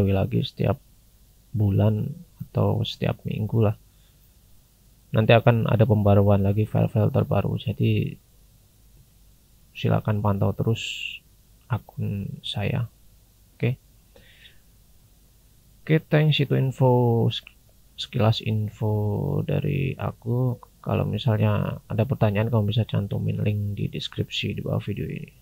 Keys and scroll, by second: 2.4 scroll down 1, 6.6-7.8 scroll down 1, 7.8-10.5 scroll up 1, 19.6-19.9 scroll down 1, 24.9 scroll down 1.